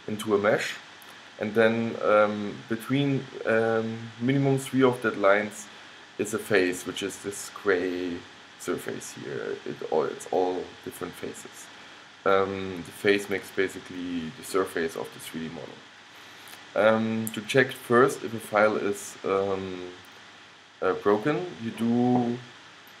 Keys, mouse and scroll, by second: 7.5-9.5 middle drag, 10.6-13.9 middle drag, 15.0-16.9 middle drag, 18.9-23.0 middle drag.